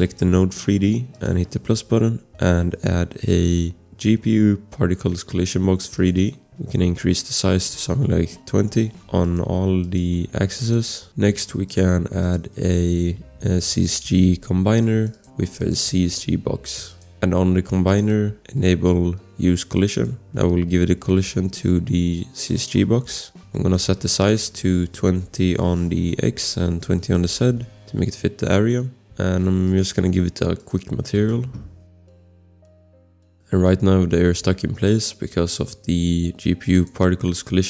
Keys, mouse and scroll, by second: 5.9 click, 6.6 scroll, 7.3 click, 8.3-9.0 typing, 9.1 ctrl+c, 9.2 click, 9.5 ctrl+v, 9.8 click, 10.2 ctrl+v, 10.6 click, 11.7 click, 13.2 c, 13.6 g, 14.8 click, 15.5-16.6 typing, 16.7 click, 18.0 click, 19.9 click, 20.2 scroll, 22.5 click, 23.0 ctrl+z, 23.6 click, 23.7 click, 23.8 scroll, 23.8 click, 24.2 click, 24.8-25.6 typing, 26.7 ctrl+c, 27.3 ctrl+v, 28.5 click, 28.8 click, 29.2 click, 29.7 click, 33.2 click, 33.4 scroll, 36.7 click.